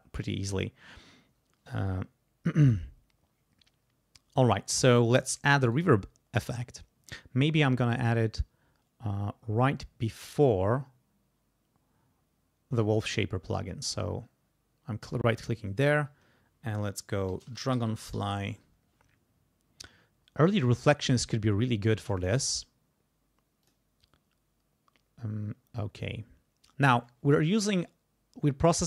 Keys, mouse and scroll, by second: 5.7 right click, 7.1 click, 12.7 right click, 15.0 click, 17.0-19.0 typing, 22.0 click, 23.6 click, 26.0 click, 28.6 click.